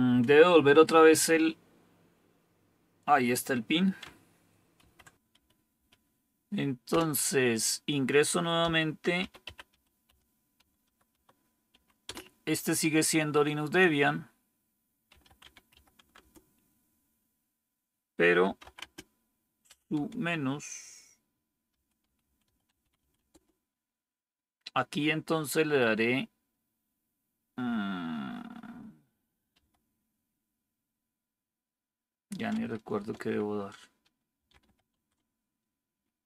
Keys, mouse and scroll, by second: 4.7 ctrl+c, 5.3 Up, 5.6 Up, 6.8 Return, 8.5-11.7 typing, 12.0 Return, 14.8-16.2 typing, 16.3 Return, 18.1-23.6 typing, 29.5 typing, 32.9 BackSpace, 34.1-35.1 typing.